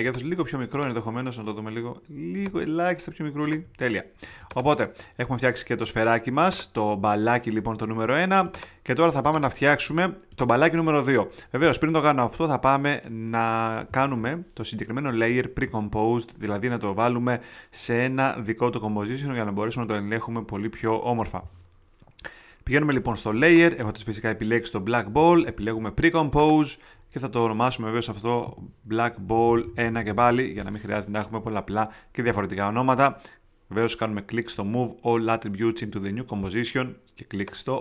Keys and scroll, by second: 28.4 Right, 29.1 BackSpace.